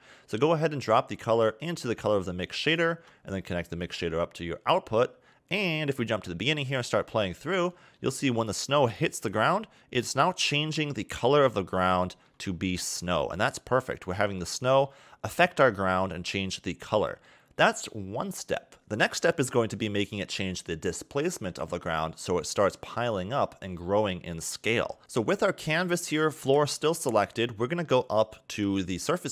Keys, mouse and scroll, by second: 1.1-2.5 scroll down 1, 2.5 ctrl+shift+click, 4.1 scroll up 1, 5.7 click, 6.4 click, 7.1-7.8 scroll up 2, 7.8 shift+middle click, 10.7 middle click, 11.5 scroll down 1, 11.9 shift+middle click, 12.6-13.2 scroll up 1, 13.9-14.5 scroll down 1, 14.7 middle click, 16.1 middle click, 19.8 middle click, 21.6 scroll down 2, 22.0 middle click, 22.4 scroll up 1, 25.0 click, 25.7 middle click, 27.8 scroll up 4.